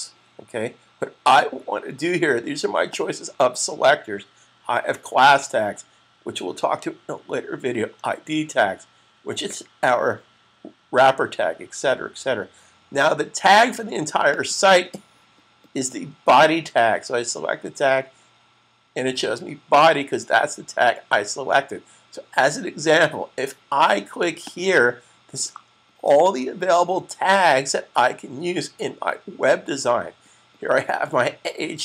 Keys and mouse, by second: 2.8 click, 14.1 click, 24.3 click.